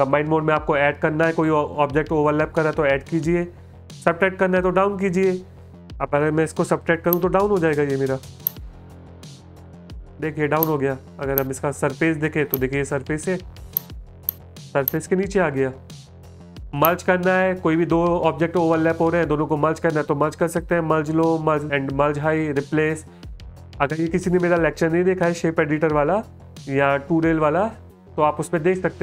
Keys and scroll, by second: 9.4 space, 10.0 space.